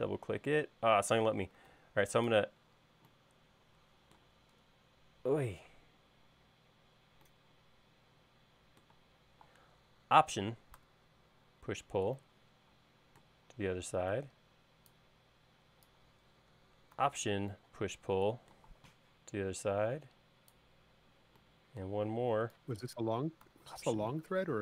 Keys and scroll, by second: 1.7 super+z.